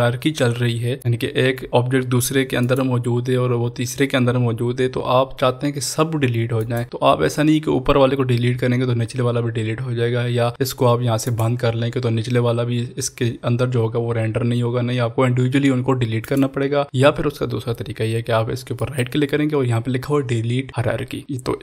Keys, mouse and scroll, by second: 1.0 click, 2.7 click, 6.5 click, 6.7 click, 11.4 click, 16.3 click, 16.3 click, 18.7 click, 18.8 right click.